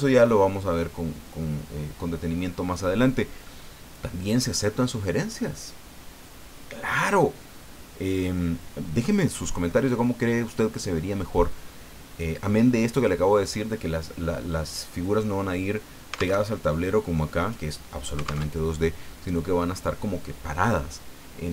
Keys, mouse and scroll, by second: 16.3 alt+Tab, 18.4 alt+Tab.